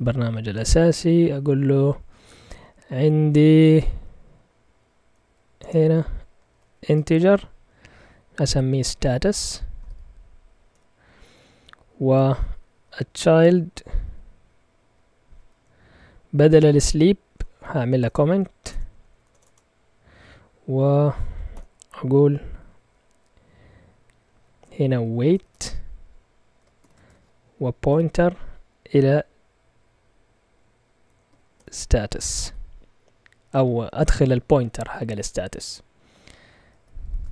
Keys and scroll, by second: 0.5 ctrl+Tab, 1.2 Up, 1.5 Up, 2.4 Up, 3.0 Up, 4.0 Right, 4.6 Left, 4.8-7.1 typing, 5.6 Return, 8.3-14.7 typing, 13.9 Right, 17.7 Escape, 17.9-19.4 typing, 21.5 typing, 24.8-26.8 typing, 27.8 typing, 31.0-32.9 typing, 37.1 shift+Tab.